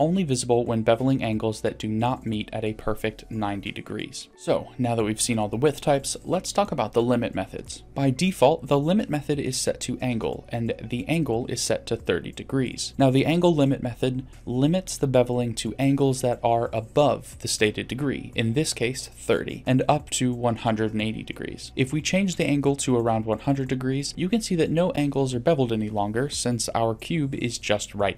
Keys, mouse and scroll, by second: 23.8 click, 26.9-28.1 drag.